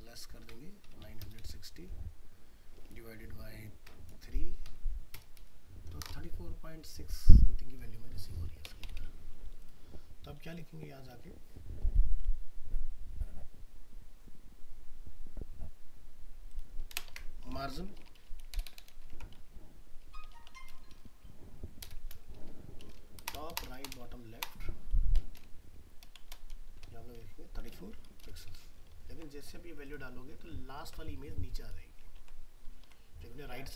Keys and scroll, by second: 28.9 ctrl+s, 32.8 alt+Tab.